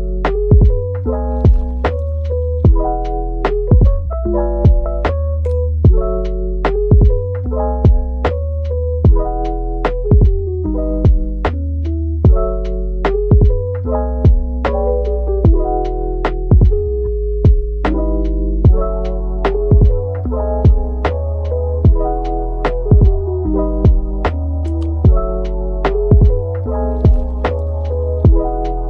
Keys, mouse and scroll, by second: 2.5 typing, 3.6 typing, 5.8 typing, 7.4-7.8 scroll up 1, 8.1 typing, 8.6-9.3 scroll down 1, 9.3 typing, 11.9 typing, 12.7 Tab, 13.3-14.1 typing, 20.5 double click, 21.4 typing, 22.3 alt+click, 22.9 alt+shift+click, 25.0 middle click, 26.3 alt+shift+click, 27.2 middle click, 28.7 alt+shift+click.